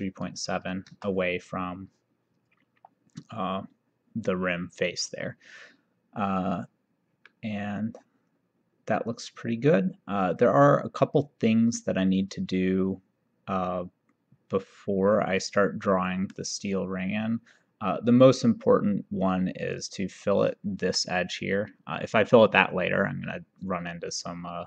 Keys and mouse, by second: 7.4 middle click, 18.2 click, 19.7 click, 20.9 Escape.